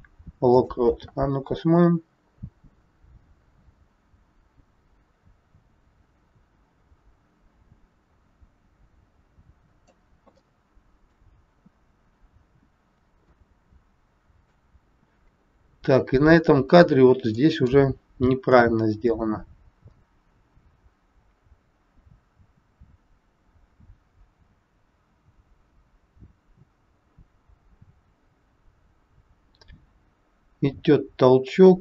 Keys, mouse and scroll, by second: 1.7 click, 10.4 shift+middle click, 13.3 middle click, 15.3-15.7 scroll up 2, 17.3 middle click, 18.5 click.